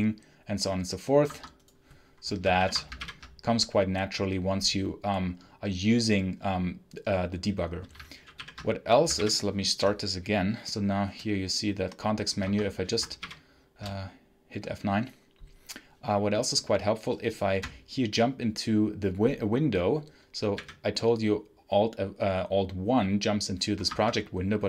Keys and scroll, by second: 1.2 Escape, 2.5 ctrl+F8, 2.9 F9, 8.3 ctrl+F8, 9.1 F9, 12.3 Escape, 13.1 shift+F9, 20.5 alt+1, 23.8 Escape.